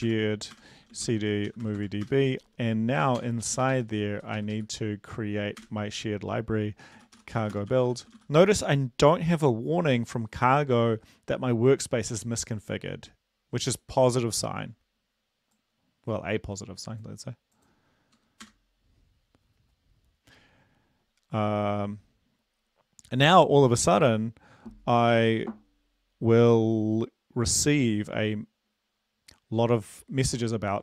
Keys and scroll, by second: 0.0-2.0 typing, 0.1 Tab, 0.5 Return, 3.2 ctrl+l, 3.4 Up, 3.6 Up, 3.7 Up, 4.2 Down, 4.4 Up, 4.5 Up, 4.7 Up, 5.6 Return, 7.0-8.1 typing, 18.4 Return.